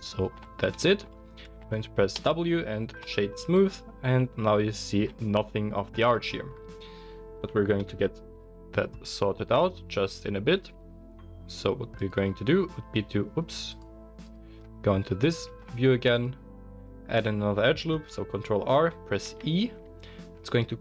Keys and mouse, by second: 0.7 Tab, 2.2 w, 7.7 KP_1, 12.0-14.3 drag, 14.3-20.8 middle drag, 14.6 Tab, 15.5 ctrl+r.